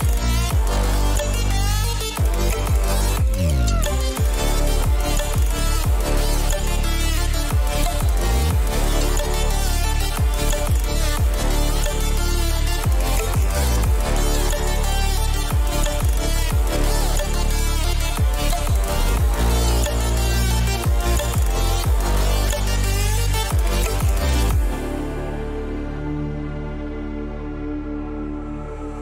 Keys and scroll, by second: 2.9 ctrl+alt+z, 3.5 ctrl+-, 19.0 ctrl+t, 25.8 Return.